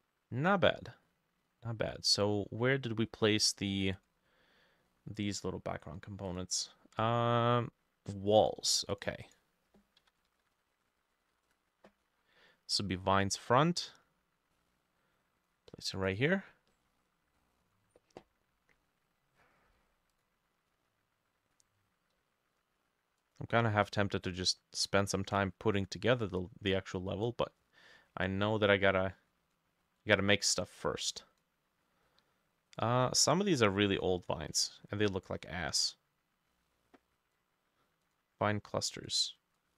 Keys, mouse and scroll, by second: 1.1-2.1 scroll down 4, 4.9 middle click, 9.3 double click, 9.8-11.9 typing, 16.7 middle click, 17.4 middle click, 32.1-37.0 scroll down 2.